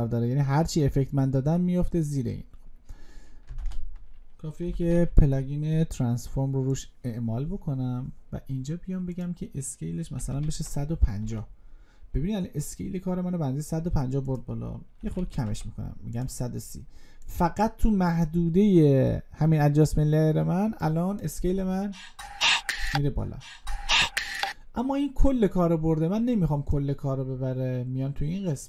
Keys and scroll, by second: 3.4 ctrl+space.